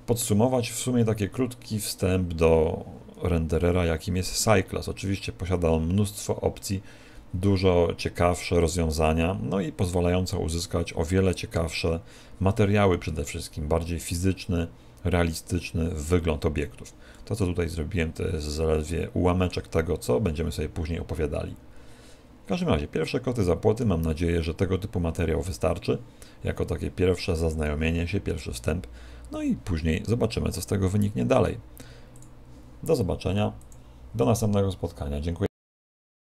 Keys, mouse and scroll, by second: 16.1 middle click, 17.3 middle click, 19.3 middle click, 23.1 middle click.